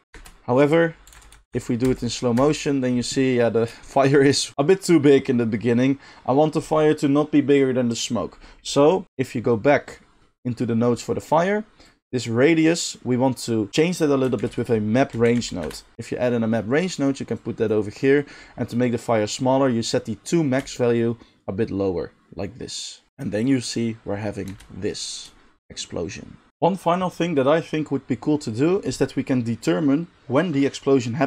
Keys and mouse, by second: 0.0-4.6 drag, 0.0 space, 0.2 space, 1.1 Right, 1.2 Left, 1.4 Left, 1.6 Left, 1.9 Left, 2.4 Right, 5.7 click, 5.9-17.1 drag, 14.4 shift+a, 17.1 middle drag, 17.4-31.2 drag, 24.5 space.